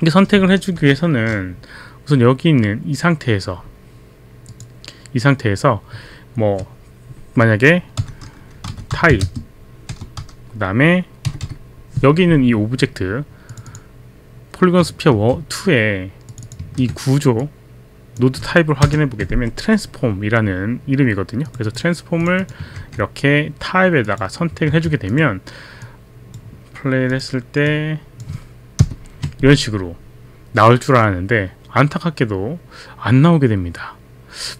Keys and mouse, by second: 0.8 Return, 4.5 click, 8.4-9.9 typing, 13.5 click, 15.1 ctrl+c, 16.2 click, 16.5 click, 16.9 ctrl+v, 16.9 click, 17.4 click, 18.9 ctrl+Return, 21.5 click, 22.2 click, 22.8 ctrl+c, 24.0 click, 24.5 click, 24.6 ctrl+v, 25.1 ctrl+v, 25.1 click, 26.0 click, 27.1 click, 28.0 click.